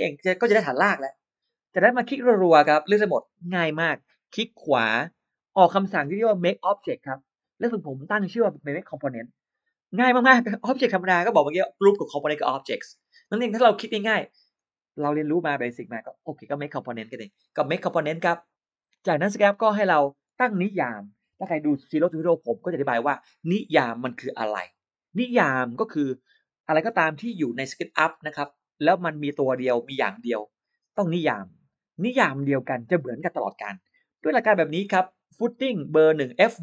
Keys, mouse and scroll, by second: 1.9-2.2 scroll up 1, 2.4 click, 2.6 click, 2.7 click, 2.9 click, 4.8 right click, 18.8 click.